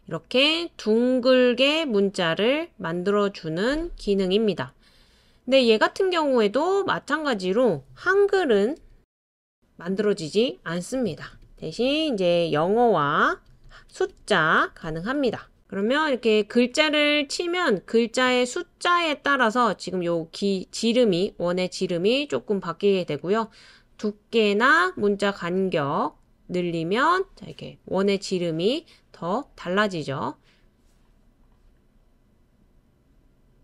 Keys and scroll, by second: 2.8-3.5 typing, 8.1-15.6 typing.